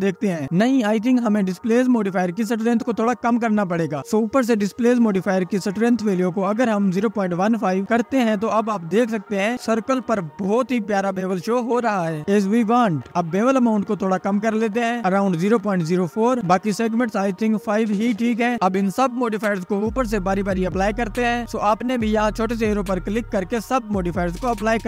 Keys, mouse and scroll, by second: 0.0-1.5 drag, 2.3-12.0 drag, 14.2-15.5 scroll down 8, 17.2-20.1 drag, 20.1-21.4 scroll up 10, 21.4-24.8 drag.